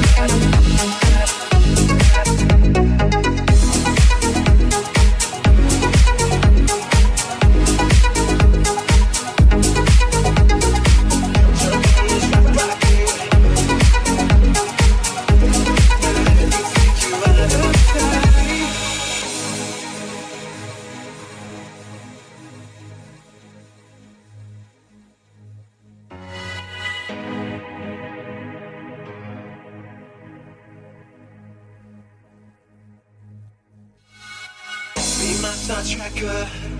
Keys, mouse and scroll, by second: 3.1-14.5 drag, 3.1 m, 4.7 middle click, 4.7 right click, 5.5 alt+z, 8.2 middle click, 8.2 right click, 8.2 f, 8.6 ctrl+z, 8.9 ctrl+z, 9.6 middle click, 9.6 right click, 10.6 alt+z, 11.8 middle click, 11.8 right click, 12.1 middle click, 12.1 right click, 12.7 m, 13.8 alt+z, 14.4 alt+z, 15.4 click, 17.3 alt+f, 17.8 alt+z, 17.8-28.2 ctrl+drag, 18.2 alt+z, 18.2 shift+f, 19.2 alt+z, 20.2 middle click, 20.2 right click, 22.0 middle click, 22.0 right click, 23.3 m, 24.2 m, 24.5 middle click, 24.5 right click, 25.7 shift+middle click, 25.7 shift+right click, 26.4 m, 27.2 alt+z, 28.5 alt+shift+click, 29.1-30.5 shift+middle drag, 29.3 alt+shift+z, 29.3 click, 29.3 right click, 29.8 alt+z, 30.1 shift+click, 30.1 shift+right click, 30.5 ctrl+z, 30.5-36.7 shift+drag, 30.7 middle click, 30.7 right click, 31.5 f, 32.2 alt+z.